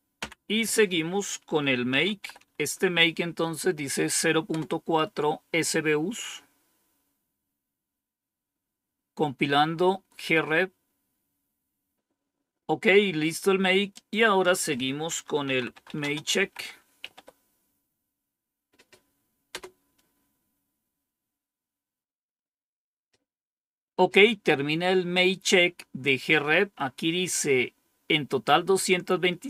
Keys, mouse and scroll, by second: 0.1 Down, 1.6-2.8 typing, 4.4 Return, 10.5-11.2 scroll down 1, 13.8 click, 15.1-17.5 typing, 19.4 Return.